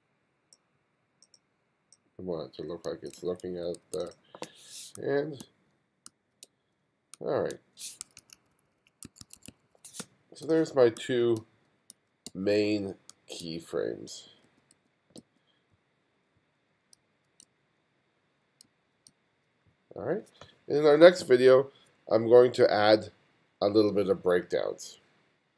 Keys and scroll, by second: 3.0 1, 4.4-6.4 typing, 7.4 g, 8.1 2, 9.0 1, 9.9 space, 10.9-14.2 typing, 16.1 Left, 16.8 f, 17.3 g, 18.1 Left, 18.5 f, 18.9 g.